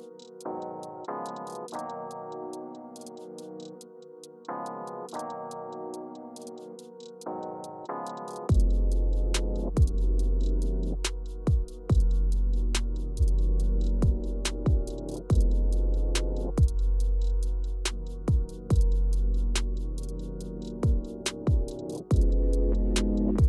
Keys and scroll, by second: 8.3-9.5 typing, 10.0 Return, 12.5 Up, 13.0 Up, 13.9 Return, 14.4 Return, 21.4 super+c, 22.0 space, 23.3 super+v.